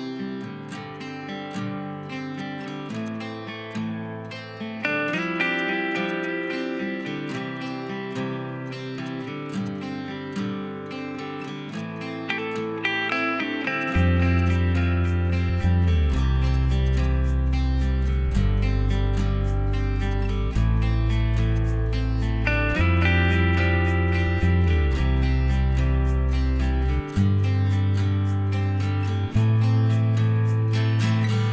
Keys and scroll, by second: 0.0 l, 6.0 e, 8.3 h, 8.8 e, 10.7 space, 11.7 p, 13.7 Return, 13.7 typing, 14.1 Escape, 14.9 ctrl+g, 15.3-16.9 typing, 17.5 ctrl+g, 19.4 m, 26.8 m.